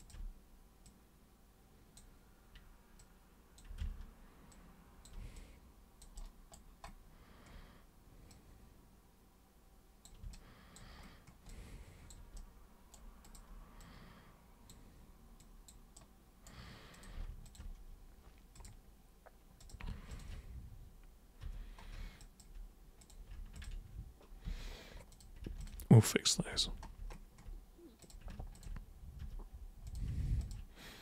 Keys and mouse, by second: 0.8-1.9 super+drag, 3.0 super+click, 3.7 ctrl+super+z, 4.5 super+click, 5.3 alt+super+click, 6.1 alt+super+right click, 8.2 super+click, 10.3 alt+super+click, 11.5 alt+super+click, 12.3 super+right click, 13.2 super+click, 13.8-14.7 super+drag, 15.3 super+click, 15.9 super+right click, 16.9 super+click, 17.4 ctrl+shift+super+click, 18.5 super+click, 19.6 super+click, 20.1 ctrl+shift+super+click, 21.4 super+g, 22.2 alt+super+click, 23.0 super+click, 23.5 ctrl+shift+super+click, 24.4 super+g, 25.1 super+click, 25.6 ctrl+shift+super+click, 26.5 super+g, 26.9 super+space, 28.0 super+click, 28.5 ctrl+shift+super+click, 29.1 super+g, 29.8 super+click, 30.4 ctrl+shift+super+click.